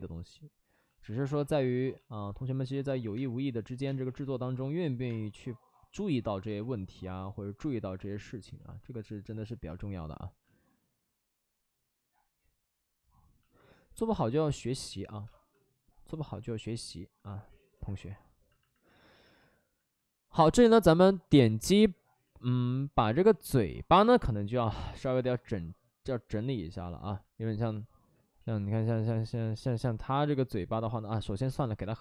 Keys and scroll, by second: 1.4 ctrl+z, 2.9 ctrl+z, 3.1 space, 3.8 space, 5.0 space, 6.4 2, 8.9 2, 14.9 space, 15.2 space, 24.5 5, 28.3 ctrl+z, 28.5 ctrl+z, 28.8 ctrl+z, 28.9 ctrl+z, 29.1 ctrl+z, 31.4 space, 31.9 space, 31.9 3.